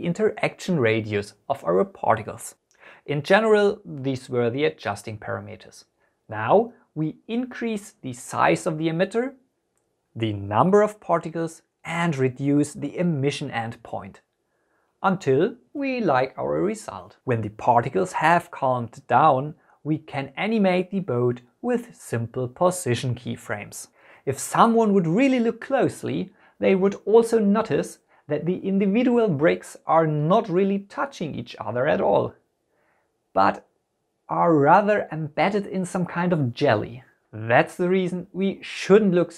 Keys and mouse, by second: 2.7-4.8 drag, 6.1 space, 16.9 space, 17.7 click, 19.2 click, 19.7 g, 19.7 z, 20.4 y, 20.4 x, 21.3 click, 21.9 g, 22.1 x, 22.2 click, 22.6 click, 22.9 click, 23.4 Home, 23.7 right click, 24.3 click.